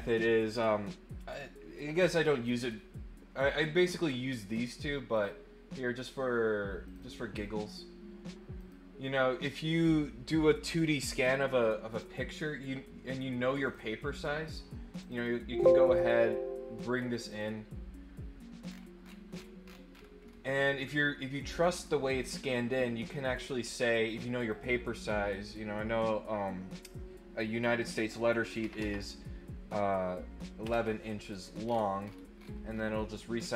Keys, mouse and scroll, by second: 5.1 click, 6.8 click, 8.5 click, 11.9 click, 13.6 click, 15.1 click, 17.2 click, 18.6-19.7 scroll down 4, 19.9-20.3 scroll up 2, 24.5 click, 31.6 middle click, 32.0-32.8 scroll up 4, 32.9 click.